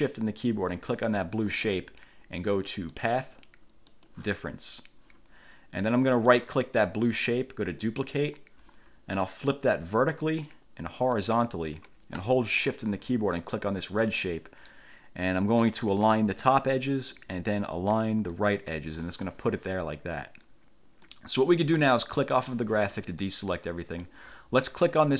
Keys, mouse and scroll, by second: 1.1 shift+click, 3.1 click, 4.1 click, 6.3 right click, 8.0 click, 10.4 click, 11.3 click, 13.5 shift+click, 16.6 click, 18.5 click, 21.2 click, 23.2 click, 25.0-25.1 drag.